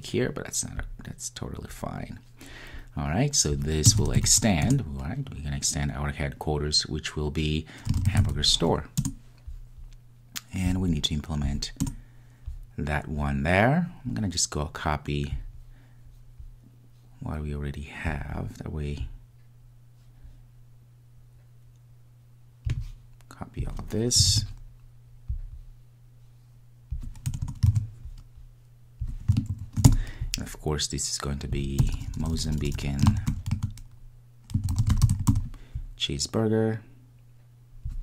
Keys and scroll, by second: 9.2 Return, 24.5 super+c, 27.7 super+v.